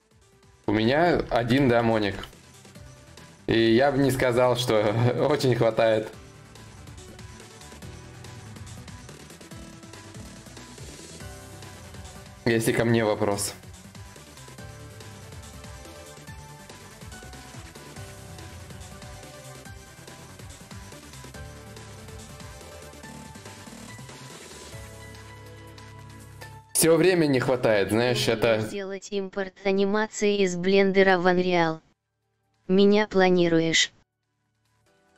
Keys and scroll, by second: 31.8 Return.